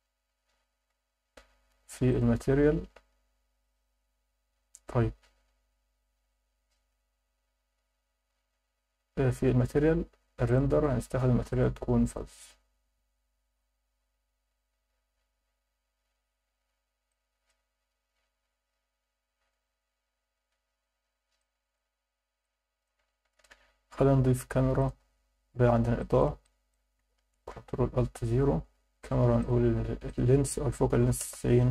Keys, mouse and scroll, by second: 2.1 click, 2.8 ctrl+s, 4.7-5.1 scroll down 4, 6.1 scroll up 2, 9.4 scroll down 2, 9.6 scroll up 1, 9.7 scroll down 1, 10.4 click, 11.5-12.9 drag, 17.1-17.5 alt+middle drag, 20.5-21.1 scroll down 4, 21.4-21.7 alt+shift+middle drag, 22.4-22.9 alt+middle drag, 23.4 shift+a, 25.5 scroll down 2, 26.0 alt+shift+middle drag, 26.4 alt+middle click, 27.3 ctrl+alt+KP_0, 29.4 click, 30.1-31.2 drag.